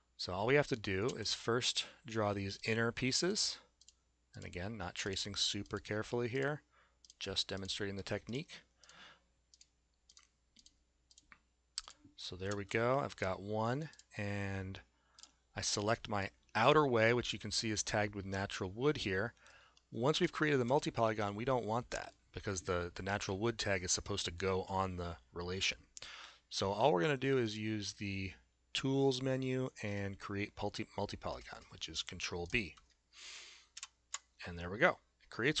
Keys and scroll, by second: 1.1 a, 12.6 s, 33.8 ctrl+b.